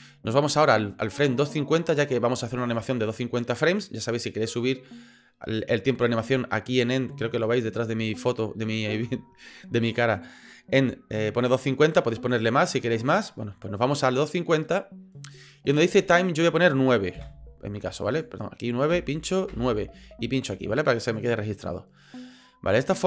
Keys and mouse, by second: 0.7-2.7 drag, 17.1 KP_9, 18.1-19.9 drag, 21.1 click, 22.4-23.0 drag.